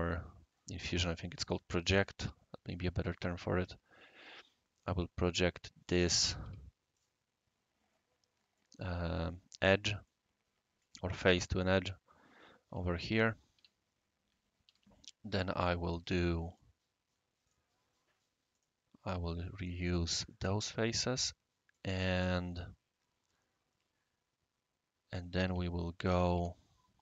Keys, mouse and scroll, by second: 6.4 q, 6.9 click, 8.1-8.5 scroll down 1, 8.5 right click, 10.0-12.7 right drag, 10.3 typing, 12.7-13.5 typing, 14.6 typing, 15.6 click, 16.5 click, 17.4 click, 18.5 click, 19.6 click, 20.3-21.7 right drag, 25.4 Escape, 26.0 click, 26.3-27.0 typing.